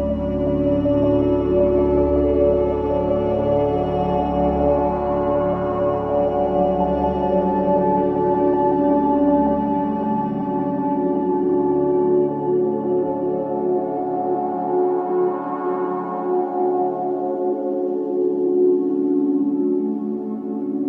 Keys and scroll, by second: 0.6 ctrl+z, 3.0 ,, 11.5 Escape, 16.4 f.